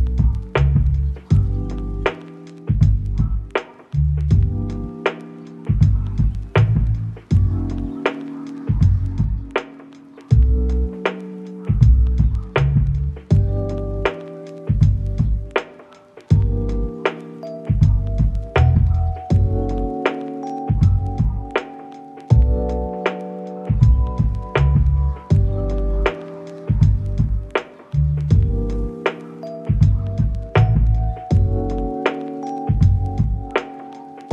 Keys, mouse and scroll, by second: 0.5 middle click, 2.6 middle click, 3.7 middle click, 5.2 middle click, 5.7 double click, 7.2 middle click, 8.6 s, 9.0 double click, 9.1 s, 9.2 double click, 11.4 middle click, 11.8 s, 12.3 double click, 14.2 middle click, 15.1 double click, 15.7 middle click, 18.4 shift+middle click, 20.1 right click, 21.0 typing, 21.1 Return, 22.2 double click, 25.2 middle click, 26.0 ctrl+z, 27.2 middle click, 27.4 ctrl+z, 27.6 middle click, 29.1 double click, 32.8 double click.